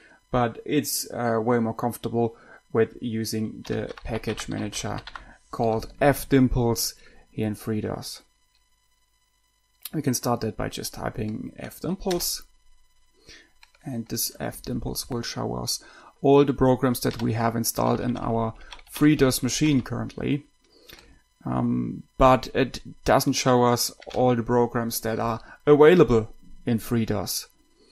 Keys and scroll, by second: 3.8-5.9 typing, 12.4 Return, 17.4 Right, 18.1 Down, 18.3 Down, 18.4 Down, 18.5 Down, 24.5 Left.